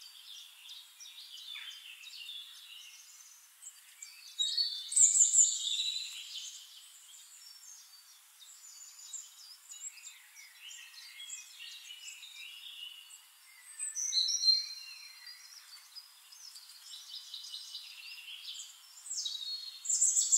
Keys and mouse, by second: 0.0 click, 0.7 click, 1.6 click, 1.9 shift+click, 2.2 shift+middle click, 2.4 click, 2.7 middle click, 3.3 click, 4.0 drag, 4.7 click, 5.0 shift+click, 5.8 click, 6.0 middle drag, 6.0 drag, 6.8 shift+-, 8.2 click, 9.2 click, 9.6-11.1 drag, 11.8 click, 12.6 shift+click, 14.0-15.0 drag, 15.3 click, 16.4 middle click, 17.3 middle click, 18.6 click, 19.5 middle click, 20.2 click.